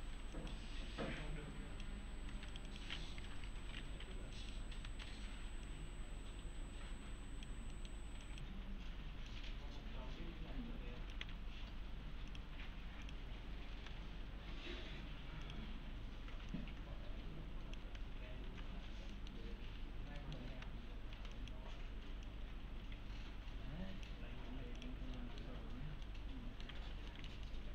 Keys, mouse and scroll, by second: 0.0 1, 0.4 click, 2.3 2, 2.5 click, 4.0 1, 4.4 click, 4.9 s, 5.7-7.5 click, 7.7 middle click, 8.2 click, 11.2 1, 12.3 click, 13.7 s, 15.4 click, 17.8 s, 18.5 alt+q, 19.1 middle click, 19.4 scroll down 1, 19.7 1, 19.9 scroll down 1, 20.2 middle click, 20.5 s, 21.1 s, 21.4 click, 25.2 middle click, 26.0-26.7 alt+middle click, 27.5-27.7 alt+middle click.